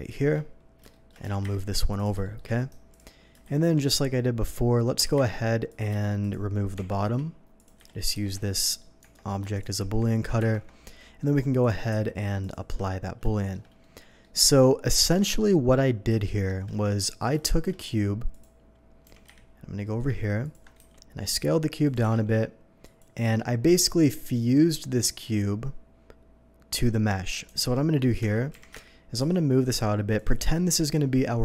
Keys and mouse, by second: 1.2 s, 1.4 y, 1.6 g, 3.4 shift+a, 5.0-6.9 drag, 5.0 g, 5.1 y, 5.3 g, 5.9 s, 6.7 Tab, 7.0 e, 7.2 Tab, 7.4-31.4 drag, 7.8 a, 8.1 shift+n, 9.0 Tab, 10.2 ctrl+Tab, 10.4 ctrl+KP_Subtract, 11.9 q, 12.4 ctrl+q, 15.0 KP_3, 17.4 shift+a, 19.0 g, 19.2 y, 19.4 g, 20.8 s, 21.9 g, 22.0 z, 27.6 Tab, 28.5 g, 28.7 y, 28.9 Tab, 29.2 x.